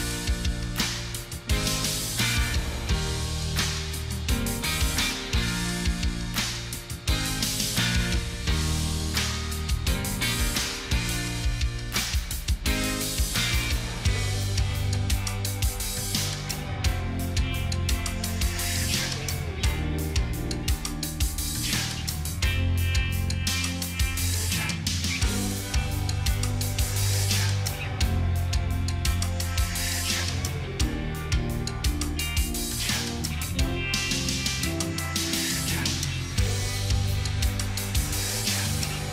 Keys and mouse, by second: 23.0 ], 23.9 double click, 24.2 double click, 25.7 double click, 27.0 double click, 28.5 double click, 28.6 double click, 31.4 double click, 33.3 double click, 33.6 double click, 37.9 double click, 38.4 double click, 38.7 double click, 39.0 double click.